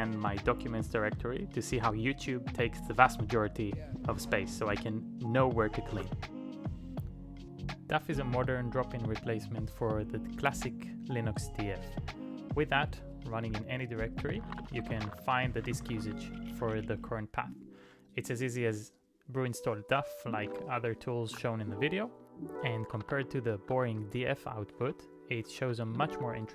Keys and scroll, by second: 5.9 q, 13.7-16.5 typing, 19.7-24.2 typing, 24.8 ctrl+e, 25.5 BackSpace, 25.7 shift+8, 26.0 Return.